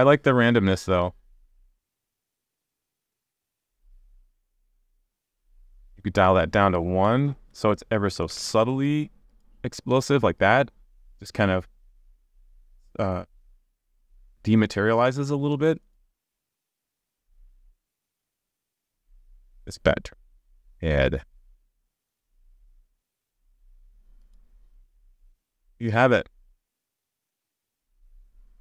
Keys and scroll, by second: 3.2 super+s, 8.3 super+s, 17.2 super+s, 23.0 super+s.